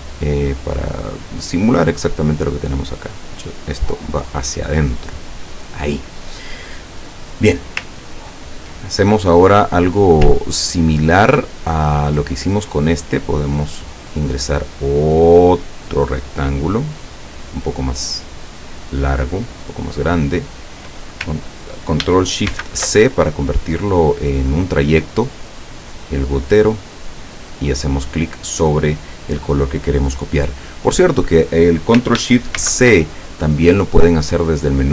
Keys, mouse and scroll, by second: 2.4-5.8 drag, 8.0-8.4 ctrl+scroll down 2, 10.4-11.6 ctrl+middle drag, 13.7 click, 14.9-20.3 drag, 26.5 click, 27.2 click, 32.6 ctrl+shift+c, 34.8 click.